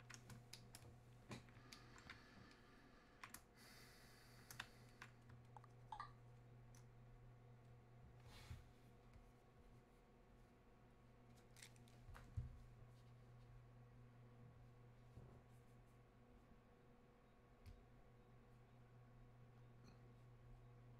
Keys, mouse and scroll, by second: 0.4 space, 0.6-10.1 drag.